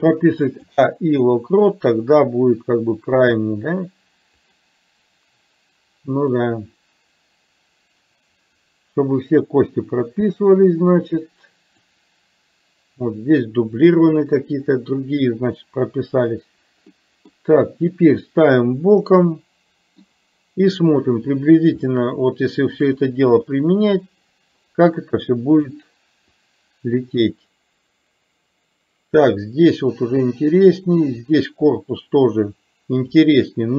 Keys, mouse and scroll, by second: 3.3 click, 4.5 click, 6.5-12.0 drag, 17.0 middle click, 18.0-20.1 middle drag, 22.0-22.9 shift+middle drag, 23.5 middle click, 25.6 click, 26.5-33.3 drag.